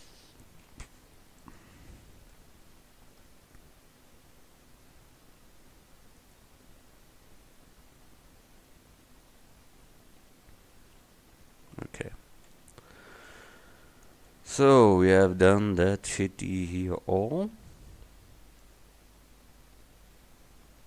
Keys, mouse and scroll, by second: 0.8 a, 6.4-9.8 right drag, 12.6 a.